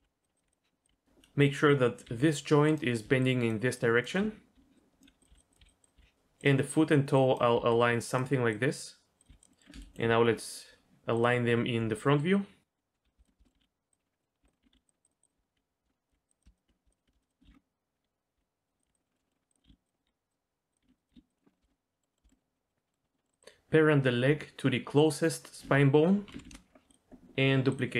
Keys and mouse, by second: 0.0-6.0 typing, 5.2 click, 5.5 click, 7.2 click, 7.5 g, 8.5 click, 9.2 click, 9.3 g, 10.3 click, 13.0 l, 13.5 g, 14.2 middle click, 14.4 Tab, 14.5 middle click, 14.6 g, 14.7 x, 15.5 KP_1, 15.8 Tab, 16.1 g, 17.4-21.1 typing, 19.0 middle click, 19.1 middle click, 19.5 click, 19.9 middle click, 21.0 click, 21.5 shift+middle click, 21.7 middle click, 22.1 middle click, 22.3 middle click, 22.5 middle click, 22.9 middle click, 23.0 middle click, 23.2 middle click, 25.0 shift+click, 26.3 ctrl+p.